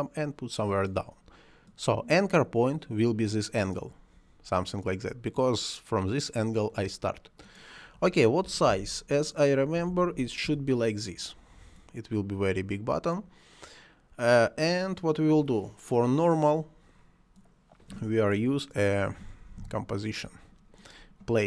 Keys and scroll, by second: 8.5 5, 8.7 1, 8.8 2, 9.9 5, 10.2 6, 10.5 Return, 19.2 c, 19.6 o.